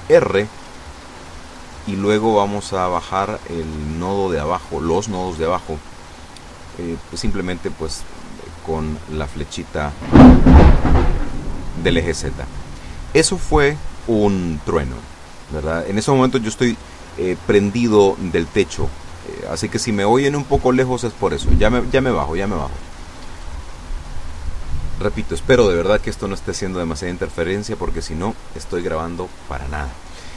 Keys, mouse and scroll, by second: 17.7 a, 19.0 b, 19.3 click, 20.5 click, 21.8-23.4 drag, 24.5 a, 24.8 b, 25.3 click, 26.3-27.3 drag.